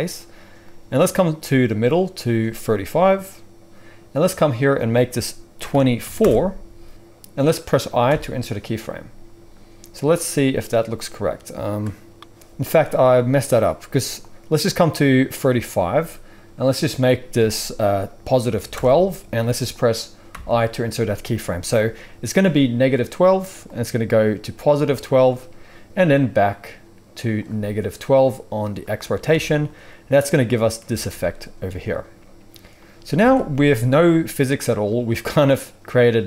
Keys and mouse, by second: 0.6-13.2 drag, 8.0 i, 13.2 middle click, 14.1-36.2 drag, 20.3 i, 22.3 typing, 29.2 space, 33.1 alt+a.